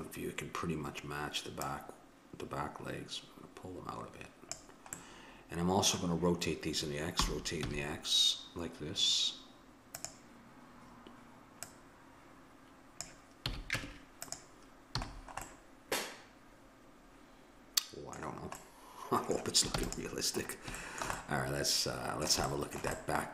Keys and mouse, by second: 1.7-3.6 drag, 4.9-6.6 middle drag, 7.2 r, 11.7-13.5 drag, 13.5 a, 13.8 Tab, 15.0 a, 19.7 ctrl+s.